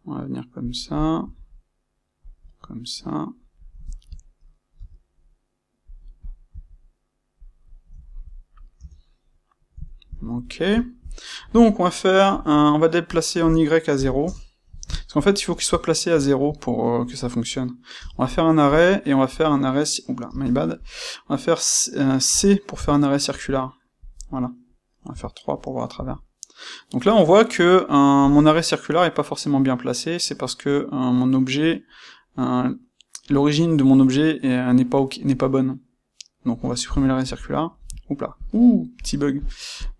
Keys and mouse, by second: 0.9 click, 2.2 click, 3.0 middle click, 3.5 click, 4.0 middle click, 4.7 c, 6.1 click, 6.4 c, 7.4 click, 7.5-13.0 middle drag, 8.7 Tab, 13.0-14.7 drag, 14.2 KP_Enter, 14.7-19.3 ctrl+shift+middle drag, 17.9 space, 19.3 click, 20.2 space, 22.3 space, 24.2 middle click, 38.3 click, 39.4 click, 39.7 click.